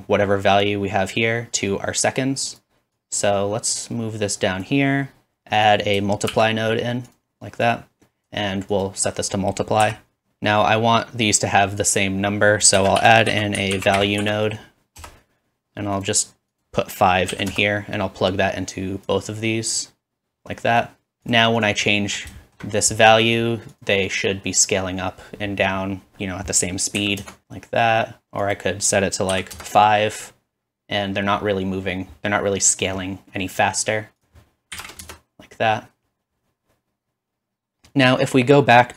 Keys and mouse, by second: 5.8-7.6 shift+middle drag, 6.4 shift+d, 7.6 click, 8.8-12.4 drag, 12.9 shift+a, 16.0 typing, 16.0 click, 18.2-21.7 drag, 21.7-23.7 middle drag, 23.7-26.2 drag, 27.4 alt+z, 29.4-33.6 drag, 34.0-38.9 drag, 37.9 ctrl+s, 37.9 space.